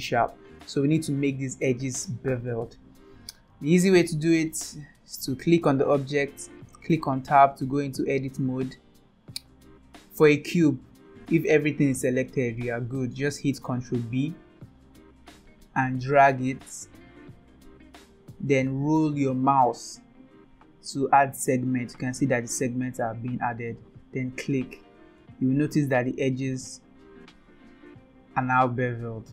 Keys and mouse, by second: 0.9 click, 4.5-5.1 middle drag, 7.0 Tab, 7.8 middle click, 14.2 ctrl+b, 25.2-29.3 middle drag.